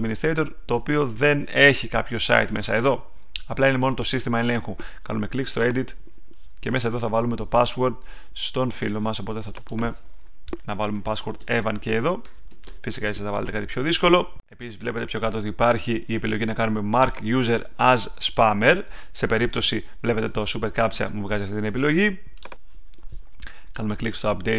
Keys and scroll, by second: 11.6 Tab.